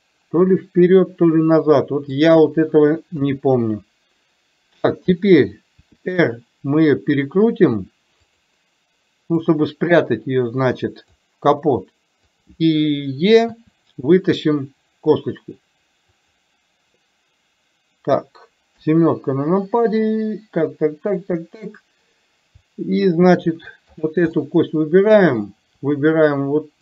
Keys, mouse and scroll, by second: 3.3 KP_3, 5.9 r, 9.6-11.3 drag, 12.3 click, 18.9 KP_7, 24.0 click, 24.4-25.5 middle drag.